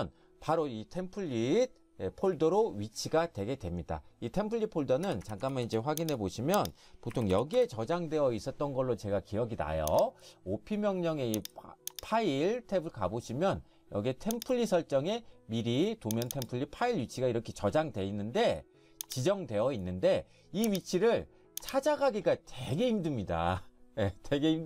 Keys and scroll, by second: 5.1 Escape, 5.3 Escape, 5.4 Escape, 5.7 Escape, 7.0-7.8 typing.